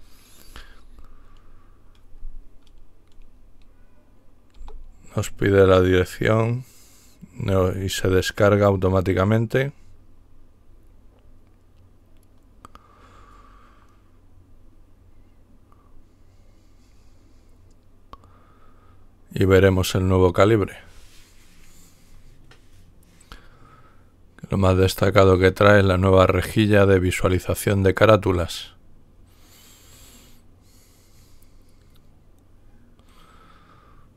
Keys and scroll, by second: 4.5 Return.